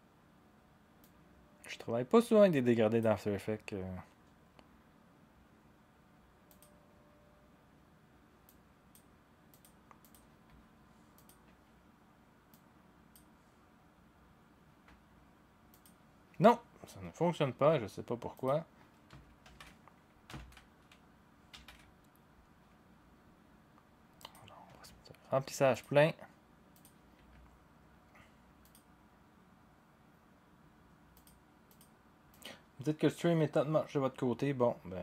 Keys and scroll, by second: 19.4 ctrl+z, 20.5 ctrl+z.